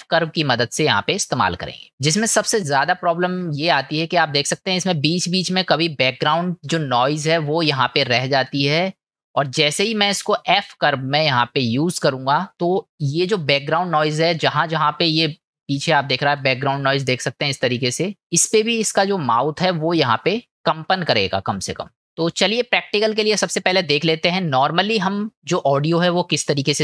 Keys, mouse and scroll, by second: 3.0 shift+middle click, 4.6 shift+middle click, 12.4 shift+middle click, 14.0 shift+middle click, 15.5 shift+middle click, 17.5 middle click, 25.9-26.4 middle drag.